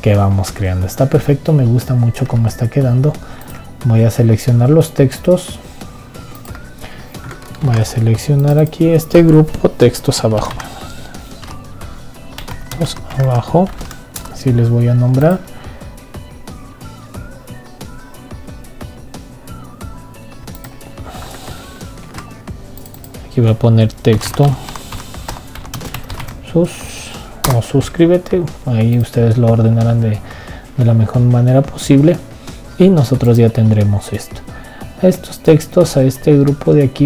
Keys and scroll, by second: 8.4 ctrl+g, 22.8 ctrl+g.